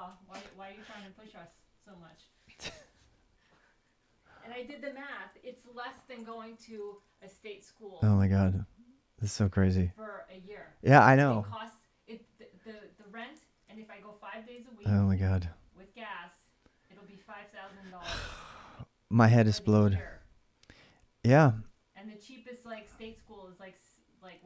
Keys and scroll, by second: 4.4-7.1 typing, 12.7-14.3 typing, 19.2 l, 21.1-23.1 typing.